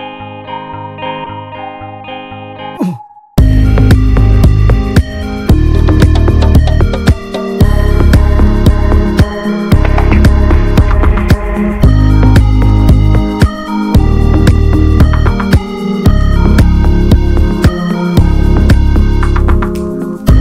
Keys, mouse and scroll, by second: 0.3 shift+middle click, 0.8 click, 1.2 s, 2.3 shift+middle click, 2.8 click, 3.2 s, 4.3 ctrl+z, 4.7-6.7 drag, 6.7 s, 7.3 click, 8.3 click, 9.0-11.1 drag, 11.3 ctrl+r, 12.4 alt+z, 12.6 alt+z, 12.8 click, 13.2 s, 14.1 click, 14.6 s, 15.4 click, 15.9 click, 16.3 s, 17.7 click, 18.5 click, 19.7 click, 20.1 s.